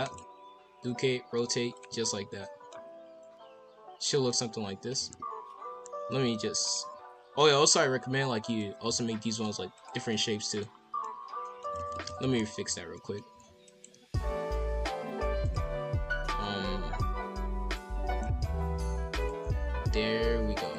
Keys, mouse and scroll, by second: 0.5 r, 2.1 middle click, 2.7-3.2 scroll down 3, 3.2-4.9 middle drag, 4.9 KP_5, 5.1 KP_1, 5.4 KP_7, 5.7-6.2 scroll up 2, 6.2 r, 7.7-8.8 drag, 8.8 s, 10.1 middle click, 10.6-11.0 scroll down 1, 11.0 middle click, 11.7 ctrl+z, 12.2 ctrl+z, 12.3 ctrl+z, 12.9 middle click, 13.3 r, 14.1 KP_5, 14.4 KP_7, 15.4-18.0 drag, 18.0 scroll up 4, 18.3 r, 20.6 click.